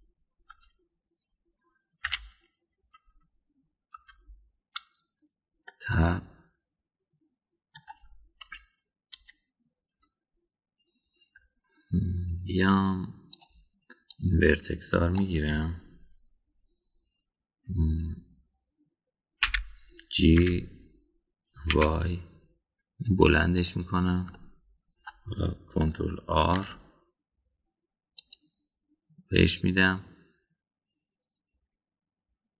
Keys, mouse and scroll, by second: 0.7 KP_1, 1.5 KP_3, 3.1 /, 4.9 Tab, 6.6-8.7 middle drag, 9.4 KP_1, 10.2 KP_3, 14.4 click, 15.1-16.2 drag, 20.4 g, 25.3-26.0 shift+middle drag, 27.5 ctrl+r.